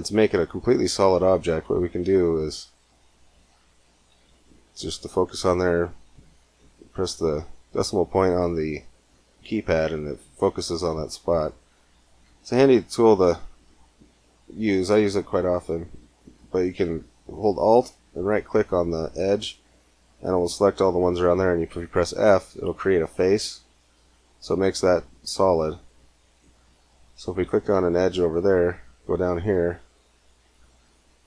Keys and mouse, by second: 4.1 KP_Decimal, 6.2 middle click, 8.1 middle click, 8.3 middle click, 8.8 middle click, 9.3 middle click, 9.8 middle click, 10.1 middle click, 10.9 middle click, 11.8-13.2 right drag, 13.2 click, 13.3 middle click, 13.4 click, 13.4 middle click, 13.6 click, 13.7 middle click, 17.8-19.8 right drag, 22.2 f, 23.4 middle click, 23.5 click, 26.1-28.0 drag, 28.2 KP_Decimal, 29.2 click.